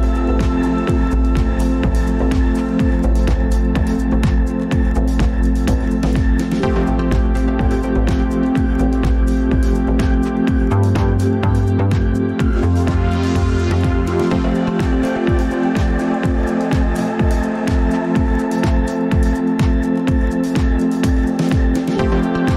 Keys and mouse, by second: 1.5 ctrl+p, 4.3 click, 5.0 shift+click, 6.2 ctrl+p, 9.6 shift+click, 10.7 ctrl+p, 14.0 click, 15.2 ctrl+s, 15.9-16.7 middle drag, 19.5 shift+a.